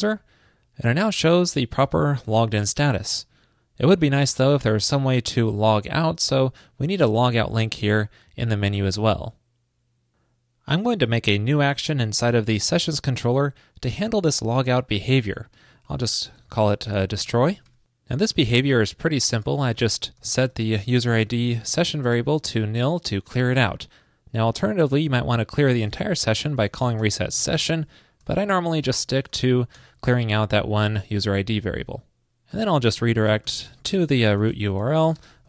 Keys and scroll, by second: 21.5 super+Right, 29.3 shift+super+Right.